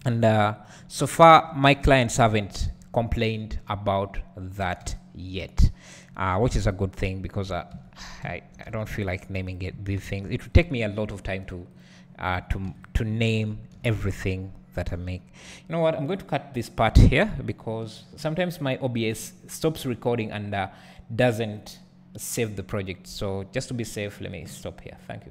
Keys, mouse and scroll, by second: 0.2 g, 0.6 click, 1.4 Tab, 2.4-2.8 scroll down 1, 2.8 Tab, 3.2-4.6 scroll up 1, 4.6 click, 5.2 g, 8.8 Tab, 8.9-9.6 scroll up 1, 9.6 click, 13.8 g, 16.9 Tab, 17.2-21.9 scroll down 1.